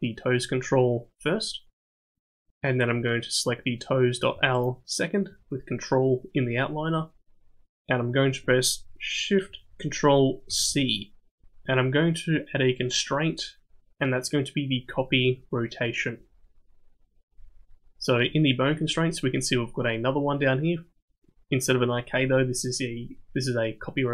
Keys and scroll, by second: 10.5 ctrl+shift+c.